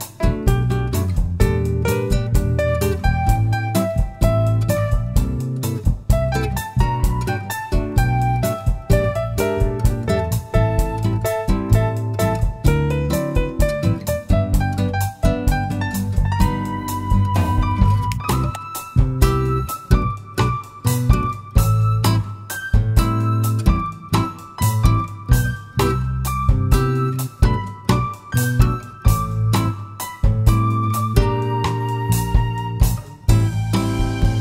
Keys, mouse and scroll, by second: 0.5-5.0 drag, 1.8 KP_Enter, 4.0 KP_Enter, 5.5 scroll up 1, 6.2-8.2 middle drag, 8.2 click, 10.2 click, 10.9-21.2 drag, 12.7 Return, 17.8 KP_Enter, 21.5-26.0 drag, 23.1 KP_Enter, 26.4 click, 30.0 click, 31.8 click, 33.7-34.4 drag.